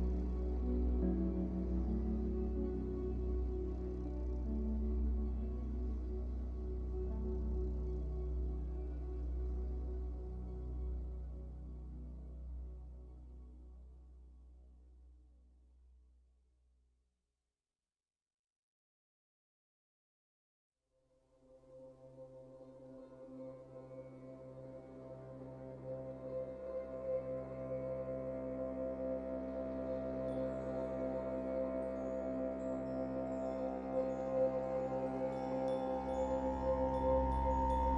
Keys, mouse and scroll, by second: 2.2 f, 2.4 click, 3.1-6.5 shift+drag, 6.3 scroll down 2, 6.5-8.1 middle drag, 8.1-11.2 drag, 8.2-9.3 scroll up 1, 10.4 ctrl+z, 12.0-18.0 drag, 18.0-19.3 middle drag, 19.3-27.1 drag, 26.7-27.1 scroll down 1, 27.1-33.5 middle drag, 27.5 scroll up 1, 28.0 scroll up 1, 29.0-29.5 scroll up 1, 29.5-29.8 scroll down 1, 31.0-31.4 scroll up 2, 31.7 scroll up 2, 33.5 click, 33.6 f, 35.3-37.9 drag.